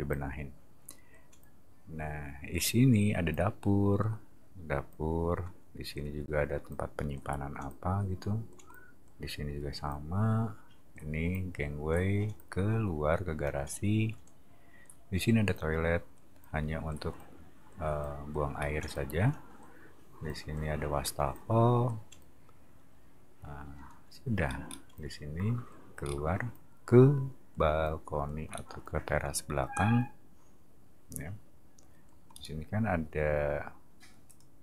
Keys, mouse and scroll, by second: 18.5 middle click, 24.6 middle click, 26.0 middle click, 28.5 middle click, 32.3 scroll up 2, 34.2 click.